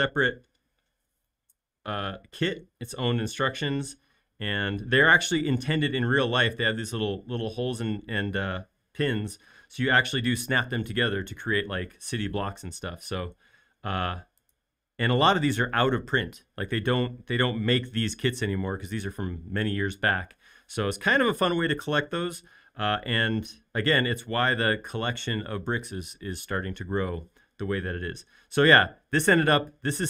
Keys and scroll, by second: 0.7 shift+q.